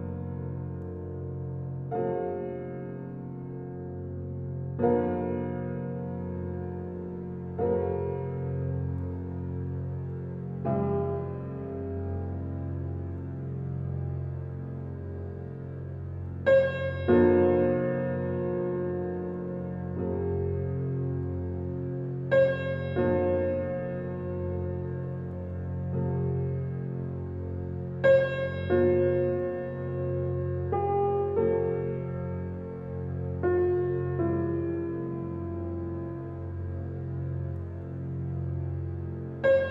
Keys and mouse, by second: 0.5 alt+middle click, 0.9-2.0 alt+drag, 3.2 click, 4.9 alt+click, 6.0 typing, 6.8-7.9 alt+shift+drag, 9.1-10.1 alt+shift+drag, 10.1-12.6 alt+middle drag, 12.6 click, 13.7 click, 15.5-15.8 drag, 16.2 click, 16.7-17.1 drag, 17.5-20.4 drag, 20.7-21.7 ctrl+alt+drag, 21.7 ctrl+alt+middle click, 22.7-27.2 alt+drag, 27.3 click, 29.3-31.2 drag, 31.2 alt+middle click, 31.6 alt+click, 32.0 shift+middle click, 32.2-33.3 shift+drag, 34.0-35.6 typing, 36.8 click, 38.4-39.2 typing, 39.5 Escape.